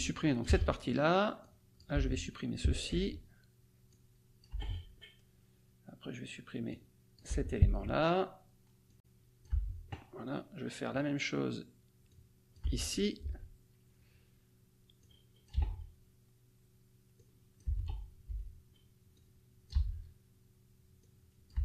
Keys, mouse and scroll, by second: 0.4 BackSpace, 1.4 click, 1.9 BackSpace, 2.9 Delete, 4.0 click, 4.5 BackSpace, 6.7 click, 7.2 BackSpace, 7.6 Delete, 8.8 click, 9.2 BackSpace, 10.5 click, 10.8 BackSpace, 11.1 Delete, 12.0 click, 12.2 BackSpace, 13.1 click, 13.3 BackSpace, 13.6 Delete, 14.1 click, 14.3 BackSpace, 15.0 click, 15.2 BackSpace, 15.7 Delete, 17.7 click, 17.9 BackSpace, 18.5 click, 18.8 BackSpace, 19.2 Delete.